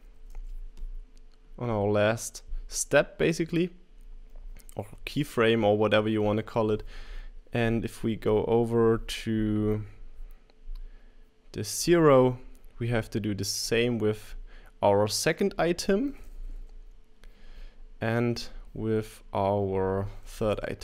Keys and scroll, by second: 0.0-0.6 typing, 4.4 3, 4.9 Return, 16.0-17.9 typing, 20.1-20.8 typing.